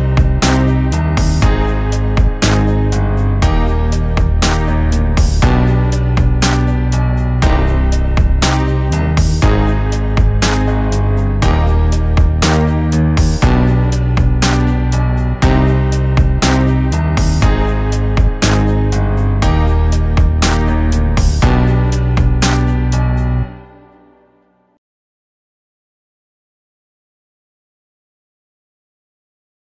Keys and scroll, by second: 1.2 ctrl+z, 2.8 ctrl+i, 4.0 ], 4.0 ], 4.6 ], 8.9 ctrl+i, 9.4 ctrl+z, 10.1 ctrl+z, 11.2 ctrl+z, 12.1 ctrl+z, 13.3 ctrl+z, 14.0 ctrl+t, 21.1 Up, 21.2 ], 21.6 ctrl+z.